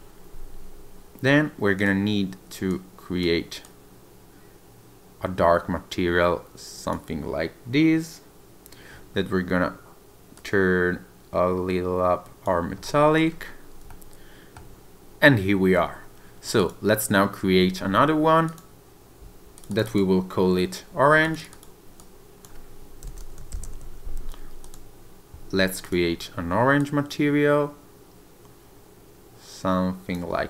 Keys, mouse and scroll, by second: 1.8 click, 10.3 click, 12.8 scroll up 2, 13.3 scroll down 2, 13.9 shift+middle click, 15.0 click, 15.0 scroll down 1, 15.2 scroll down 1, 16.5 click, 18.5 click, 25.8 click.